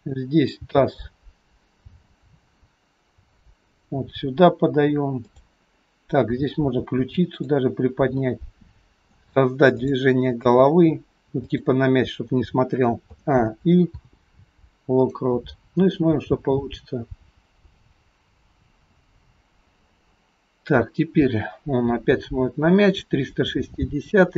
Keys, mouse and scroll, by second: 0.5 g, 5.2 click, 6.8 r, 8.3 middle click, 9.9 click, 10.6 r, 13.1 a, 13.9 i, 15.9 click.